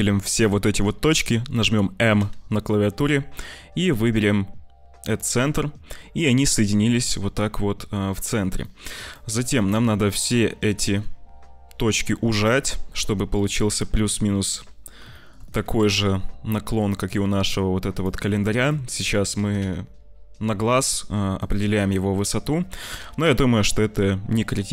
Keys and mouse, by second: 2.1 m, 8.6 click, 9.1 click, 10.6 s, 13.3 click, 15.1 shift+click, 15.7 g, 18.3 shift+click, 18.6 click, 19.3 g, 22.7 g.